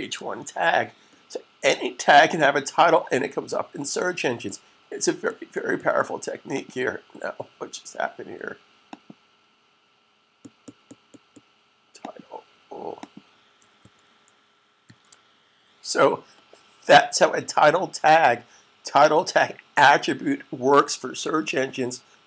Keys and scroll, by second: 0.7 super+s, 13.7 super+s, 14.7 s.